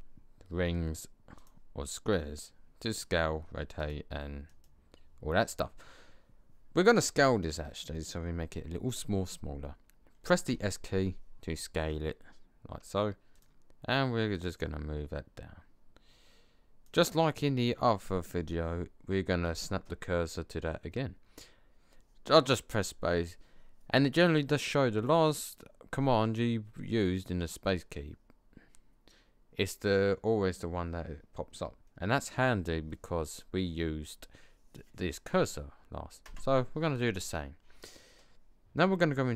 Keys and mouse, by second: 10.4 s, 14.3 click, 19.4 space.